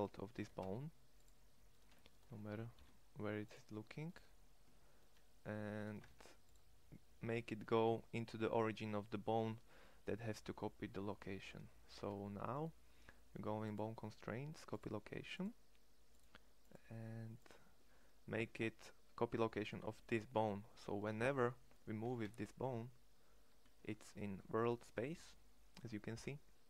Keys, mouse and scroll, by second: 0.0 e, 2.3 alt+p, 5.6 shift+s, 11.7 Tab, 21.6 g.